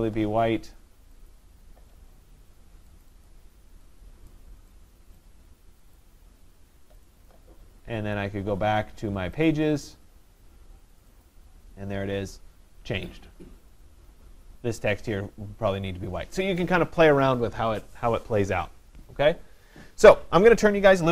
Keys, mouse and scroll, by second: 1.3 click, 3.3 click, 4.3 click, 5.2 click, 7.1 click, 9.5 click, 11.3 click.